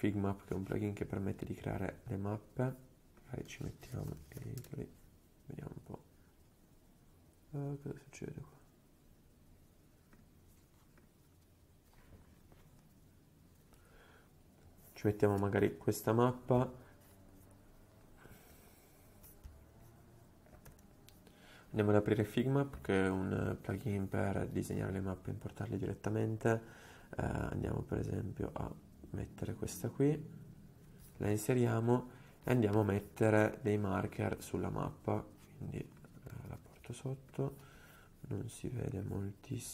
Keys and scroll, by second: 3.7-5.0 typing, 6.5 typing, 18.7 super+z, 20.8 super+p, 36.5 alt+super+è.